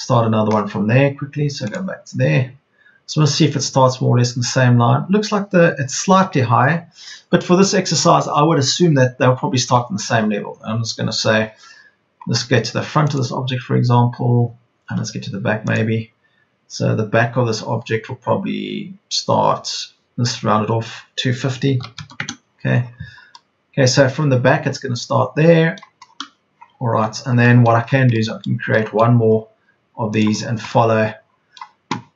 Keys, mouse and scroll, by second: 21.6 KP_2, 21.8 KP_5, 21.9 KP_0.